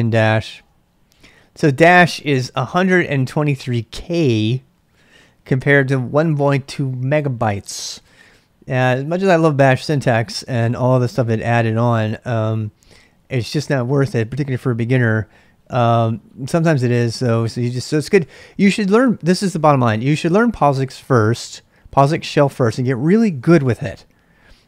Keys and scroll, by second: 0.0-0.9 typing.